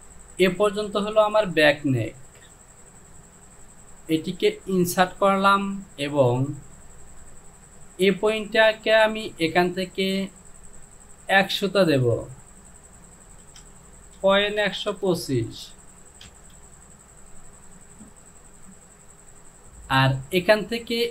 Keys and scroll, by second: 12.3 Down, 13.4-15.2 typing, 13.6 Down, 16.3 Return.